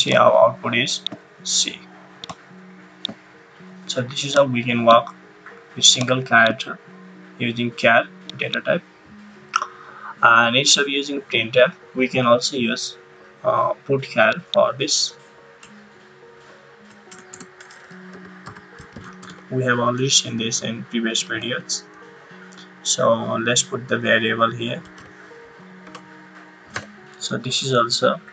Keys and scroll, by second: 15.6 BackSpace, 17.1-19.7 typing, 21.1 shift+9, 24.6-25.4 typing, 25.8 Right, 26.7 ;.